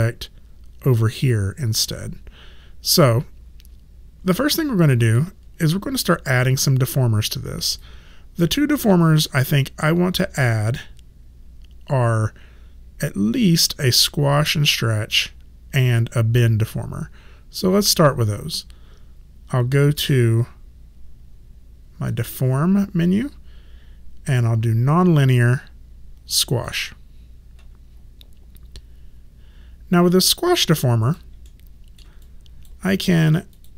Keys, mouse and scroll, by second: 4.4 alt+click, 5.7 alt+click, 6.9 alt+middle click, 7.8 alt+right click, 8.7 alt+middle click, 9.6 alt+click, 22.1 click, 26.5 click, 30.7 alt+click, 31.5 alt+middle click, 32.2 alt+click.